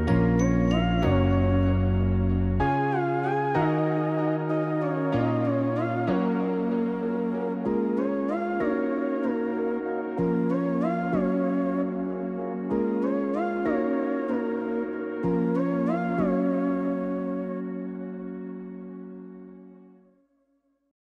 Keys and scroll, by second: 10.5 0.